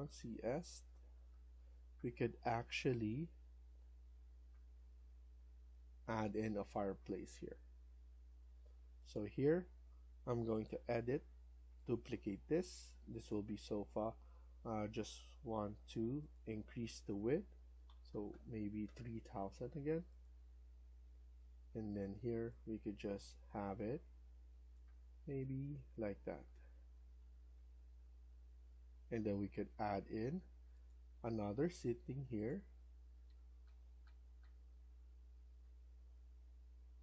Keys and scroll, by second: 2.0-2.7 typing, 6.4 Escape, 6.6 Escape, 17.7 typing, 21.3 Escape, 21.5 Escape, 26.0 Left, 26.4 Down, 26.8 Left, 27.1 Left, 28.4 Escape, 28.6 Escape, 33.1 Down, 33.5 Down, 34.0 Down, 34.3 Down.